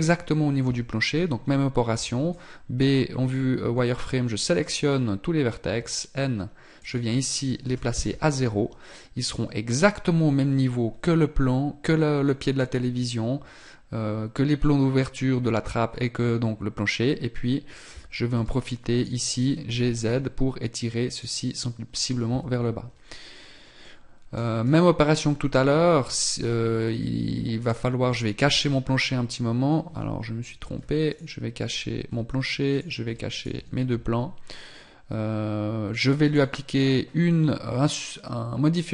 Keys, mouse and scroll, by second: 6.8 click, 23.9 middle click, 24.7 right click, 25.8 z, 27.6 right click, 28.7 h, 30.7 alt+h, 31.1 right click, 32.1 h, 32.7 right click, 33.1 h, 33.3 right click, 33.5 h, 36.3 right click.